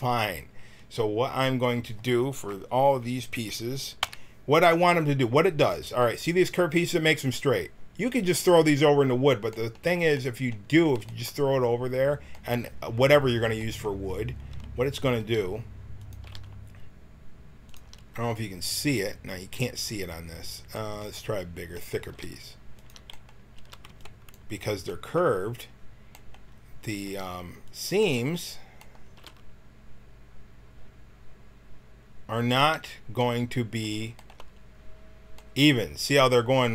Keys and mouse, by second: 4.0 KP_1, 9.9-11.3 middle drag, 15.2 g, 16.2 g, 19.6-23.5 drag, 22.1 g, 23.5 a, 23.8 b, 27.0 g, 29.1 g, 33.5 click.